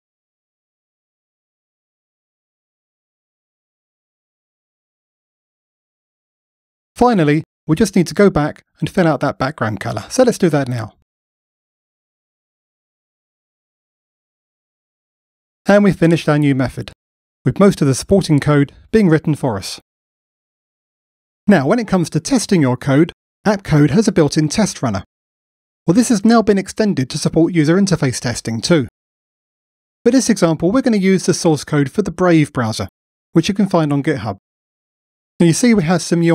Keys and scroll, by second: 0.5 alt+Return, 3.7 Return, 8.4 ctrl+Down, 12.9 Return.